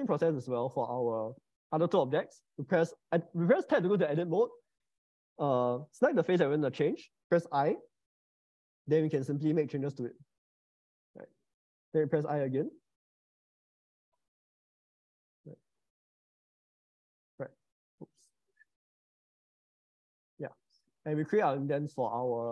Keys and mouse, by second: 0.7 Tab, 1.3 Tab, 5.8 click, 7.5 i, 8.2 click, 9.1-10.6 drag, 10.1 0, 11.5 middle click, 12.2 i, 13.1-15.5 drag, 14.0 0, 15.7-17.0 drag, 16.7 0, 18.5-20.0 drag, 21.1 middle click, 21.9 Tab, 22.4-22.5 middle drag.